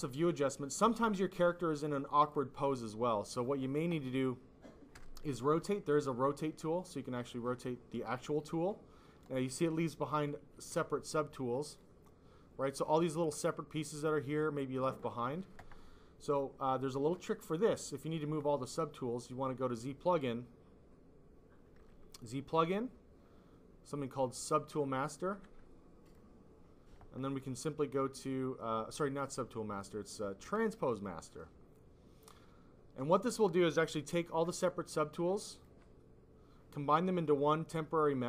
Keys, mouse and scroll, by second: 2.2 click, 3.1 click, 5.9 click, 6.3 click, 7.4 click, 11.1 ctrl+z, 11.6 click, 11.8 click, 14.1 click, 17.5 click, 17.7 click, 25.4 F5, 26.0 click, 26.5 click, 29.2 click.